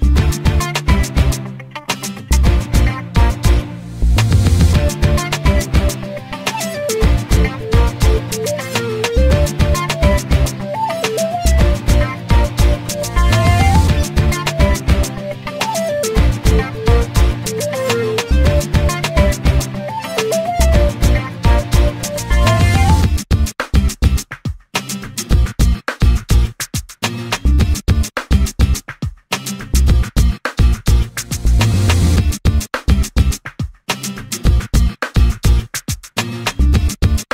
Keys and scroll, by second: 0.8 l, 5.8 [, 6.7 p, 19.2 l, 21.0 space, 22.6 g, 26.2 Delete, 29.4 l, 34.8 Escape.